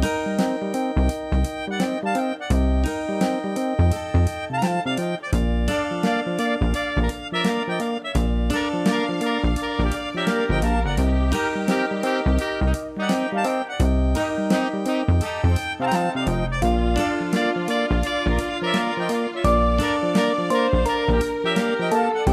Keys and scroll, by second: 14.1 ctrl+i, 16.0 ctrl+=.